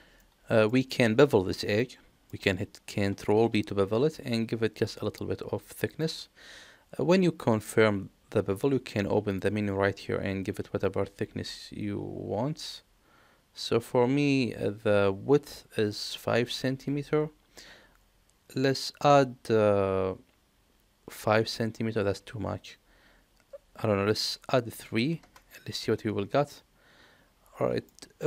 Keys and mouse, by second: 0.3 middle click, 1.1 middle click, 2.0 middle click, 3.5 ctrl+b, 7.2 middle click, 9.3 click, 15.9-26.6 drag, 27.8 shift+middle click, 28.1 shift+middle click.